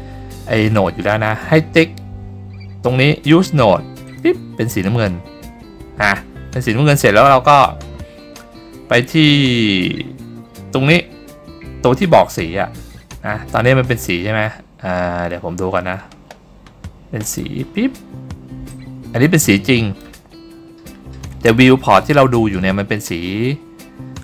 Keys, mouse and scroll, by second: 4.2 click, 7.2 scroll down 1, 8.2-8.6 scroll down 3, 9.0-10.2 scroll down 2, 10.2-12.4 scroll up 3, 15.5-16.4 scroll up 4, 16.4-17.0 scroll down 2, 17.4 click.